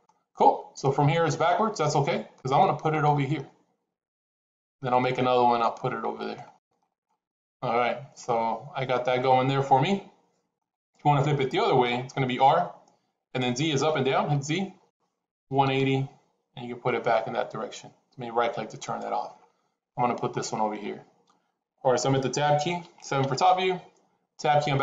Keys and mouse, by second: 0.7 middle click, 2.3 middle click, 4.5 middle click, 5.7 middle click, 8.2-10.5 middle drag, 12.3 r, 19.8 middle click, 23.1 KP_7.